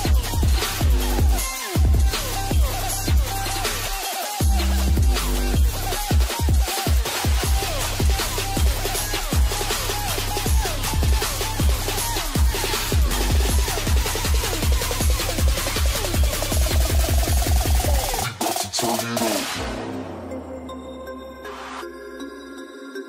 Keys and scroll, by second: 19.8 ctrl+space, 21.7 ctrl+space.